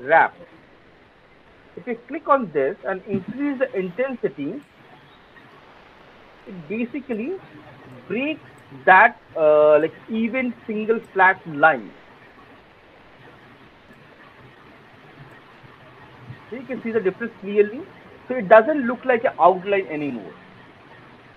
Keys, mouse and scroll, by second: 1.3 click, 4.6 click, 4.8 click, 6.0 click, 7.0 alt+middle click, 7.5 alt+middle click, 8.4 alt+middle click, 13.2 click, 13.6 click, 14.0 click, 14.5 click, 14.9 click, 15.3 click, 15.5 click, 15.9 click, 17.2 alt+right click, 17.6 alt+right click, 18.0 alt+middle click, 18.5 alt+click, 21.1 alt+middle click.